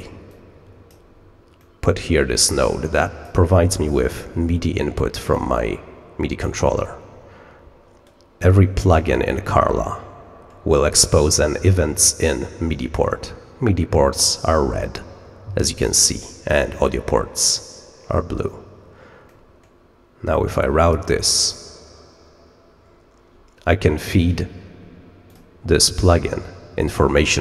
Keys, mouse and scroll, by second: 0.2 click, 1.5-2.0 scroll up 1, 2.0 scroll up 1, 2.1 scroll down 1, 2.4-3.2 drag, 3.8 scroll up 1, 4.0 scroll down 1, 5.2-6.4 drag, 8.7 click, 9.8 middle click, 10.0 middle click, 10.2 middle click, 10.4 middle click, 20.2-21.5 drag, 25.2 click.